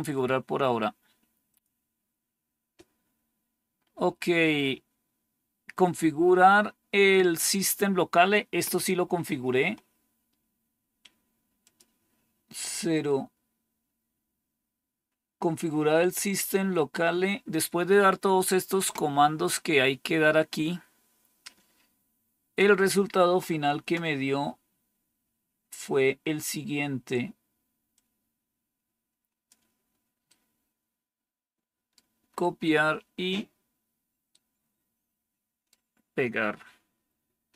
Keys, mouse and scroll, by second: 0.0-0.6 typing, 0.1-0.9 scroll down 1, 0.9-1.4 scroll down 1, 1.4 click, 6.3-9.6 scroll down 1, 9.6-11.5 scroll down 1, 11.5 click, 12.9-14.4 scroll down 1, 14.4-16.3 scroll down 1, 16.3-17.0 scroll down 1, 17.0-19.7 scroll down 1, 19.7-20.5 scroll down 1, 20.5-22.7 scroll down 1, 22.7-25.0 scroll down 1, 25.0-26.4 scroll down 1, 26.4-27.8 scroll down 1, 27.8-29.4 drag, 30.2-31.9 right drag, 34.2-35.6 right drag.